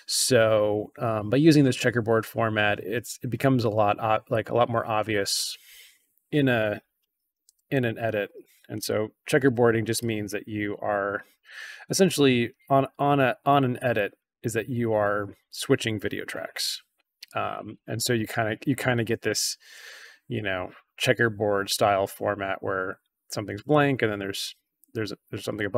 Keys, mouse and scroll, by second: 3.1 scroll down 2, 4.2-5.3 drag, 7.4 c, 9.4 b, 9.9 click, 10.6 a, 10.9-11.4 drag, 13.4-14.1 drag, 14.8-15.1 drag, 17.2 drag.